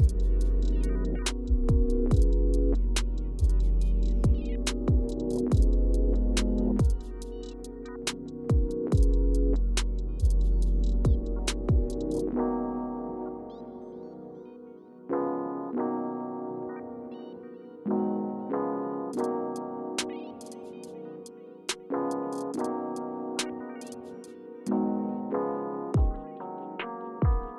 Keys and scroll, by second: 1.7 space, 6.1 space, 23.5-24.7 typing, 26.6 typing.